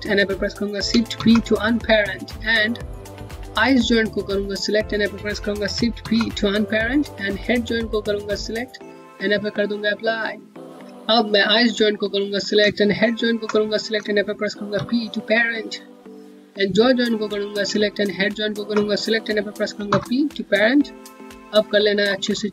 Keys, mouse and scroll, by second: 3.1 click, 7.8 click, 12.9 shift+click, 16.3 click, 18.1 shift+click, 20.9 scroll down 1, 22.0 middle click.